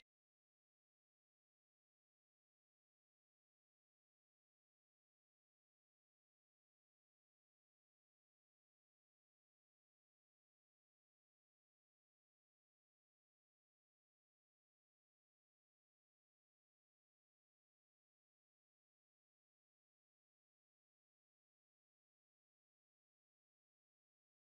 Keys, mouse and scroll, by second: 0.9 middle click, 1.3 middle click, 1.6 middle click, 4.3 middle click, 4.9 r, 7.1 g, 9.1 r, 10.3 g, 11.6-12.3 middle click, 12.1 middle click, 14.0 click, 14.9 s, 17.7 shift+d, 20.3 s.